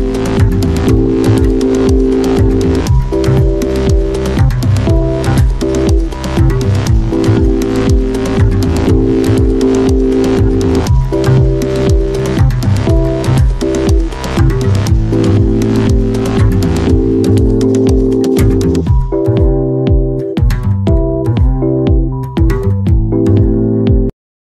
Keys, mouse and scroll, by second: 13.3 Tab.